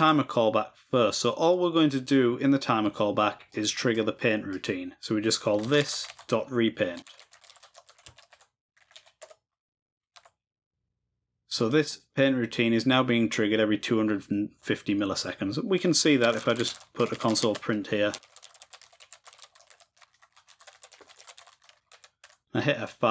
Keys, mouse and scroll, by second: 0.0-1.6 drag, 3.5-5.8 drag, 7.8-9.7 shift+drag, 11.6-13.2 drag.